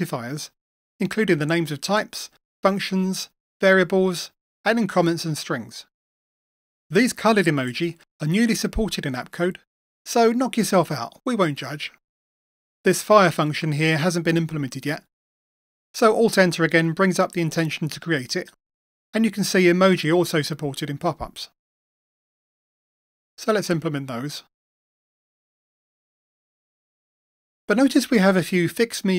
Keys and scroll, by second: 17.8 alt+Return, 24.1 Return, 25.8 alt+Return, 26.8 Return.